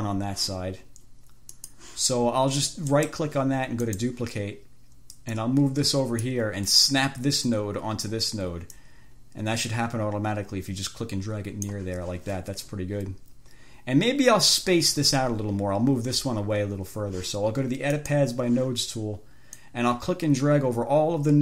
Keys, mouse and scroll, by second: 1.8 click, 3.2 right click, 4.1 click, 5.5-6.7 drag, 9.1-12.2 drag, 18.2 click, 19.8-21.4 drag.